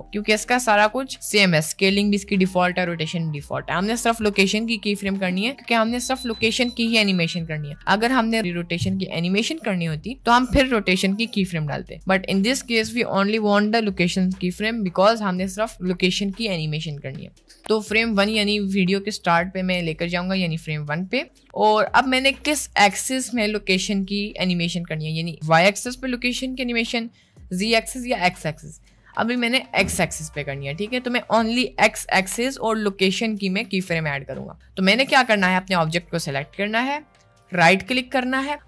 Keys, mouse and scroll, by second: 19.3 click, 20.1 click, 35.1 click, 37.3 click, 37.9 middle click.